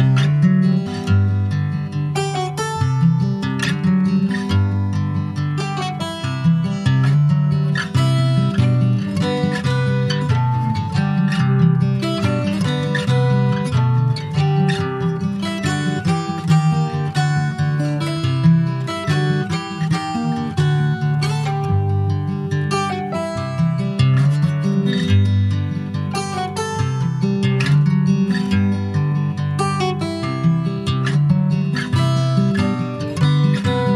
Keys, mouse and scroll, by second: 1.4 s, 3.7 alt+z, 4.6 click, 7.5 click, 7.8 middle click, 8.3 alt+z, 8.5 click, 8.7 scroll down 2, 8.9 middle click, 9.5 ctrl+s, 9.7 click, 10.1 shift+middle click, 10.9 click, 13.6 click, 13.9 scroll down 3, 14.2 middle click, 14.6 ctrl+s, 15.0 click, 16.8 ctrl+s, 17.4 click, 18.0 click, 18.5 ctrl+s, 23.6 click, 24.1 click, 24.6 ctrl+a, 25.8 click, 26.1-27.8 right drag, 30.3-31.4 drag, 31.4 ctrl+s, 32.6-33.9 drag.